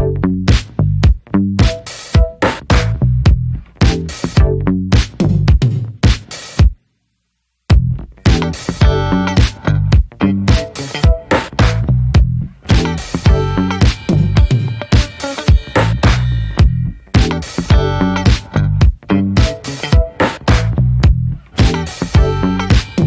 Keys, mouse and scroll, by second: 1.4 ctrl+z, 3.1 click, 3.5 ctrl+z, 5.9-11.8 drag, 14.5-23.0 drag.